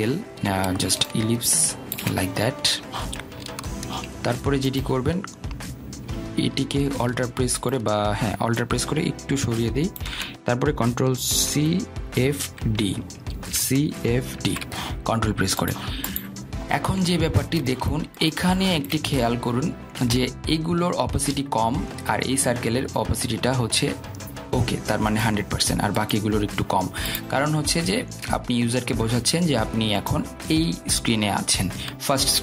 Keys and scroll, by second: 12.3 ctrl+c, 12.7 ctrl+f, 12.8 ctrl+d, 13.4 ctrl+c, 13.5 ctrl+f, 13.9 ctrl+d.